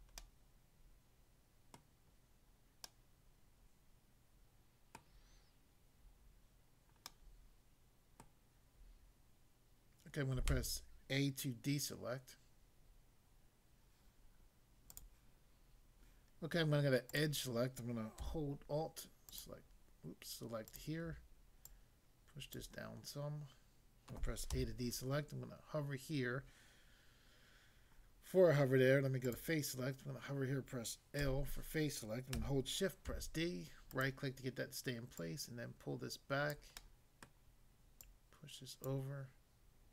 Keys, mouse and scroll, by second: 1.1 click, 1.8 middle click, 2.8 middle click, 5.0 middle click, 7.1 middle click, 8.3 middle click, 10.5 a, 14.9 click, 17.2 click, 19.3 alt+click, 20.6 alt+click, 21.7 alt+click, 22.5 click, 24.5 a, 29.3 click, 31.2 l, 33.1 d, 34.0 right click, 35.2 click, 36.6 click, 36.8 middle click, 37.3 middle click, 38.0 click, 38.9 click.